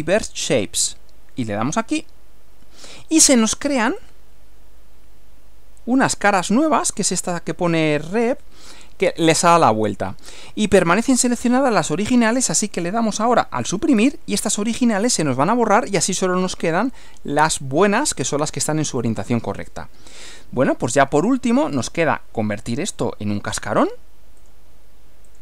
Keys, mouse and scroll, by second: 1.8 click, 4.0-7.1 drag, 13.8 Delete, 16.7-19.6 middle drag, 21.8 click, 24.4 click, 25.3 click.